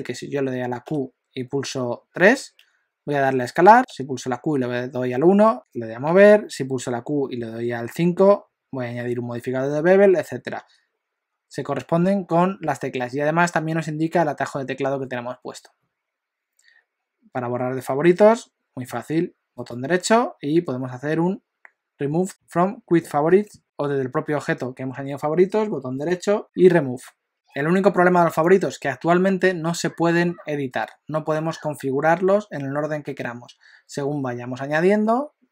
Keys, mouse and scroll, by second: 0.8 q, 6.1 q, 10.6 q, 17.7 q, 25.9 right click, 27.3 click.